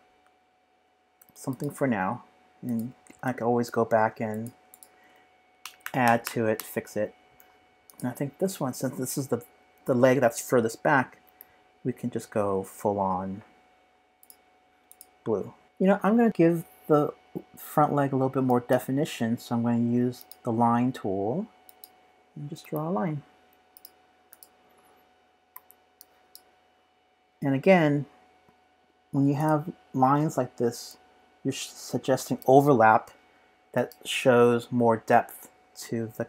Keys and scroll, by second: 5.6 super+-, 5.8 super+-, 6.6 super+-, 25.5 z, 27.5 p.